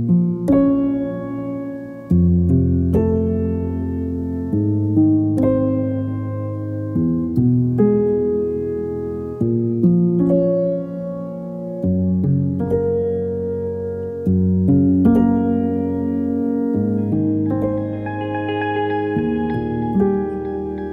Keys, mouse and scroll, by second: 0.4-3.6 drag, 3.8 click, 4.5 shift+l, 4.9 click, 10.4 click, 11.0-16.7 typing.